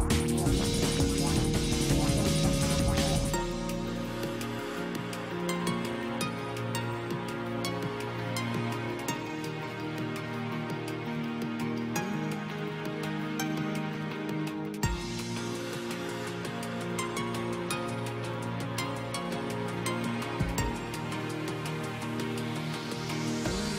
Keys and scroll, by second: 16.3 space.